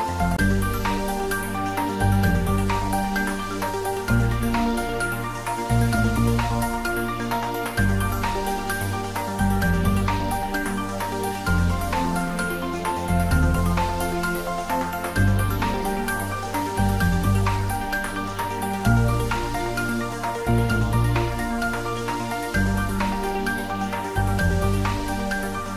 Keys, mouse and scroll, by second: 3.1 click, 4.5 s, 4.8 x, 6.5 click, 7.2 g, 7.9 x, 10.5 click, 10.9 s, 11.1 x, 14.1 click, 14.3-15.3 typing, 16.0 click, 18.6 scroll up 1, 19.1-20.9 middle drag, 20.9 scroll up 1, 21.5-23.5 middle drag, 23.5-25.7 middle drag.